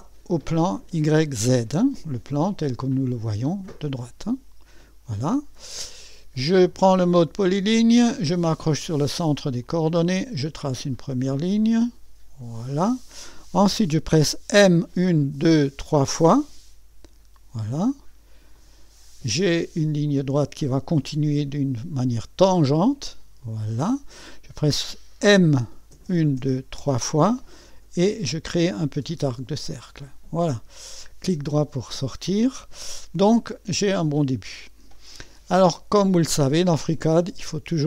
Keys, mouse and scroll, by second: 0.0 click, 4.2 click, 4.6-5.9 drag, 7.6 click, 9.6 click, 12.4 click, 14.6-15.8 typing, 18.5 click, 23.4 click, 25.9-26.8 typing, 29.5-31.4 drag, 31.4-32.6 middle drag, 33.4-33.9 scroll up 1, 33.9-35.8 right drag.